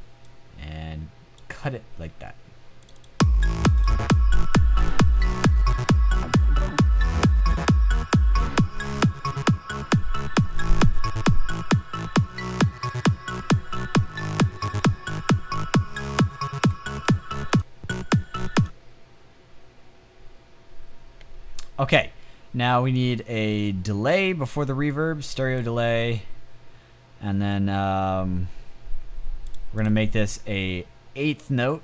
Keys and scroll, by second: 21.2 space.